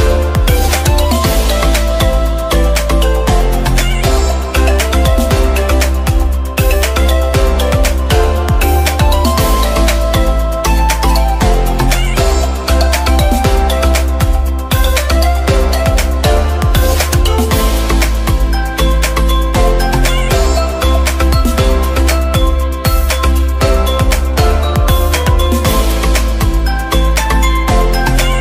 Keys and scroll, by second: 25.1 ], 25.3 ], 25.6 ].